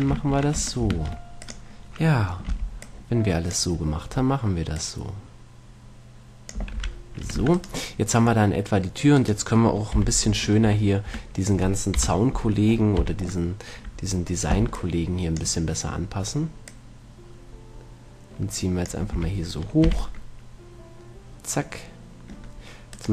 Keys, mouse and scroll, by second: 0.9 ctrl+Tab, 1.3 ctrl+Tab, 2.7 b, 5.0-6.9 drag, 7.1 a, 7.7 Tab, 7.8 right click, 8.7-10.6 middle drag, 10.4 z, 10.6 Tab, 10.6 right click, 10.9 Tab, 11.4 Tab, 12.2 KP_1, 13.3 z, 14.9 b, 16.9-18.9 drag, 19.4 a, 20.1 z, 20.5-22.3 middle drag.